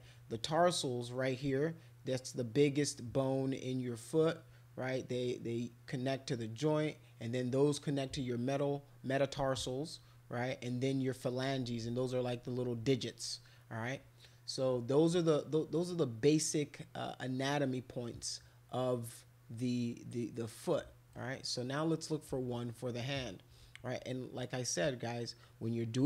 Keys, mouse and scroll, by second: 21.1-22.2 right drag, 22.8 middle click.